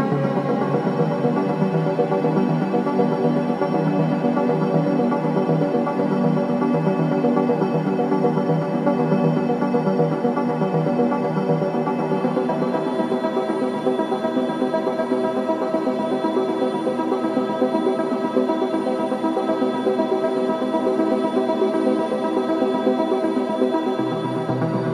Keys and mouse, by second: 0.9-6.1 alt+drag, 7.2 ctrl+z, 7.5 ctrl+z, 7.9 ctrl+z, 8.2 ctrl+z, 9.4 Tab, 10.6 3, 11.6 Tab, 13.0-14.8 drag, 15.0 g, 16.2 click, 18.2 click, 19.9 click, 21.2 click, 22.2 click, 23.6-24.9 drag, 24.8 g.